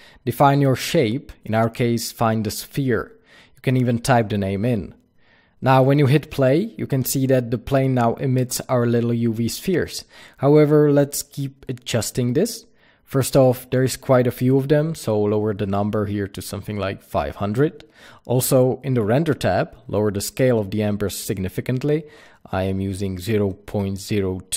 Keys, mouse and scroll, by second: 12.7-13.3 scroll up 1, 14.0-20.8 drag, 14.7 KP_Enter, 15.7 KP_0, 18.5 KP_Enter, 19.1-20.2 scroll down 2, 22.9 KP_0.